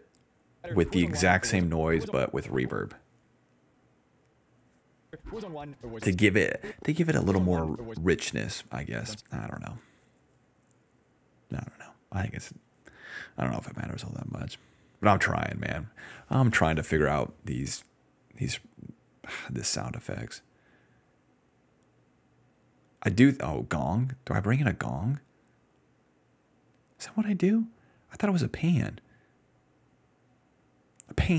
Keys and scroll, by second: 0.0-2.2 typing, 4.2-9.5 typing, 20.6-21.5 typing.